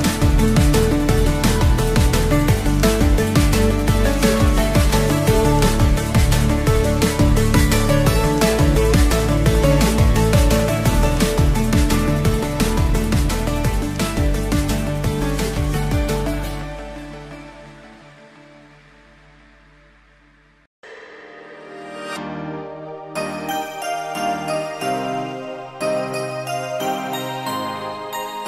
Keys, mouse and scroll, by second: 1.1 click, 2.3 click, 2.7-4.6 right drag, 4.6-5.2 middle drag, 5.4-6.0 scroll up 3, 6.6-7.4 scroll down 3, 7.4-8.9 middle drag, 9.8 Tab, 11.4 1, 11.9 click, 13.1 KP_1, 14.3 click, 14.7 scroll up 2, 15.1 shift+middle click, 16.6 b, 19.4 e, 19.8 z, 20.2 2, 20.7 Return, 22.2 click, 22.7 click, 23.4 scroll down 1, 24.0 Tab, 24.4-25.0 middle drag, 25.5 click, 26.1-26.4 scroll up 2, 26.6-27.9 shift+middle drag.